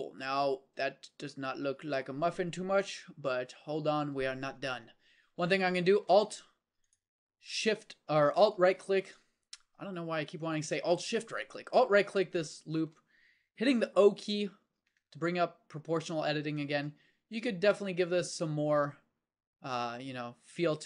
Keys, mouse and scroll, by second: 3.2 KP_1, 4.2 Tab, 6.0 ctrl+Tab, 14.1 o, 16.6 s.